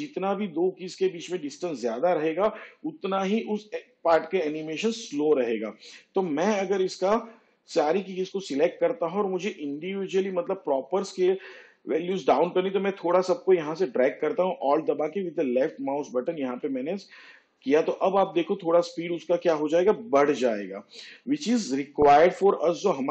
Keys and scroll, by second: 21.6 space.